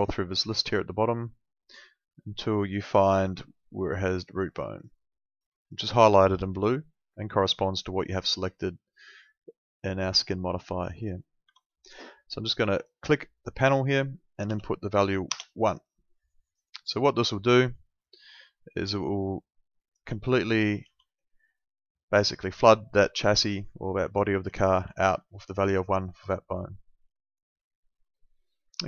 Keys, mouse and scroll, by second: 3.5 ctrl+2, 11.5 Escape, 12.7 click, 14.5 1, 15.3 Return, 18.7 click, 20.2 alt+middle click, 21.1 alt+middle click, 23.3 alt+middle click, 25.3 middle click, 27.3 click.